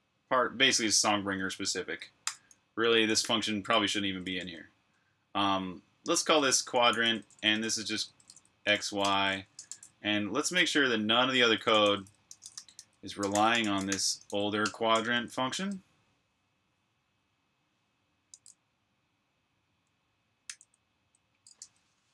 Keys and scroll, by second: 2.2-4.8 typing, 5.9-9.6 typing, 9.6 super+f, 11.7 shift+super+f, 12.0-14.6 typing, 16.3-17.0 typing, 20.4 j.